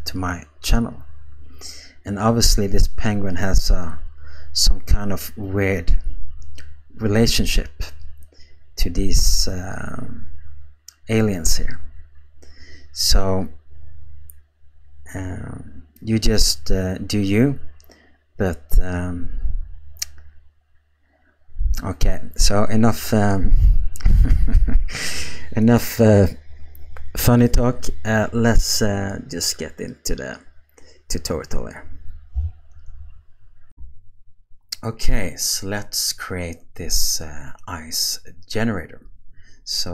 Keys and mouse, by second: 33.7 q.